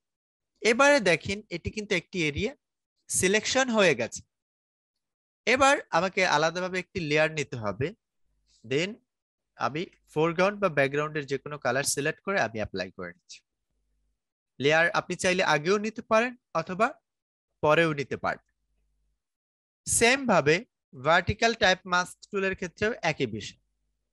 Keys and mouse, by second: 6.7 click, 11.2 ctrl+d, 19.7 right click, 20.9 click.